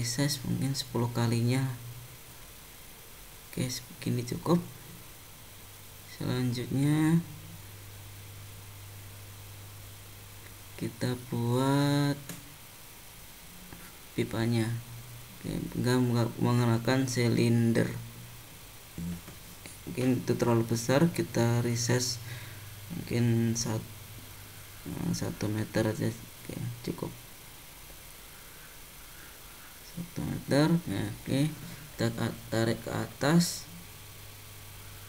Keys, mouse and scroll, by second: 0.0 s, 3.8 click, 4.6 middle click, 7.8 middle click, 8.5 scroll down 1, 9.0 middle click, 12.9 middle click, 13.6 scroll up 1, 14.9 shift+a, 22.7 click, 24.6 click, 30.9 g, 34.3 shift+middle click.